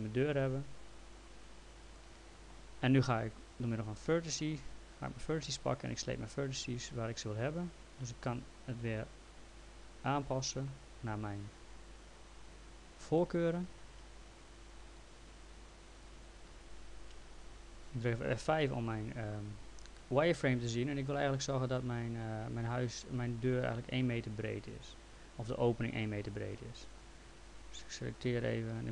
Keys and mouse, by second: 4.0 click, 5.4 click, 6.9 click, 11.4 click, 13.2 click, 13.9 ctrl+z, 14.7 click, 16.5 g, 18.4 F3, 23.4 click, 24.7 click, 26.9 click, 28.3 click.